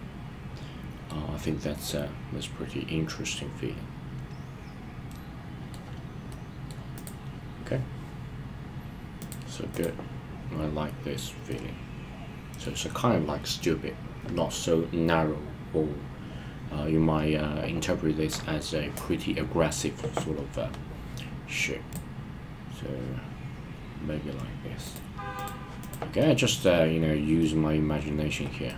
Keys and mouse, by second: 1.7-5.7 middle drag, 6.3 middle click, 9.2 click, 9.6 click, 11.4-12.6 middle drag, 21.9-23.2 drag, 24.9-25.5 drag, 26.2-26.7 middle drag, 27.4-28.4 middle drag.